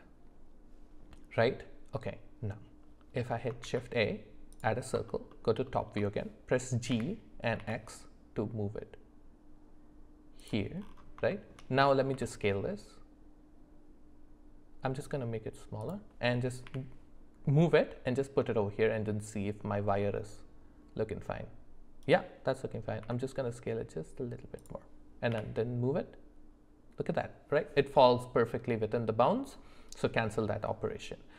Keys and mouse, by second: 3.6 shift+a, 5.1 alt+middle click, 5.3 alt+middle click, 5.6 alt+middle click, 6.9 g, 11.3 shift+middle click, 12.1 s, 16.6 g, 23.0 s, 25.3 g.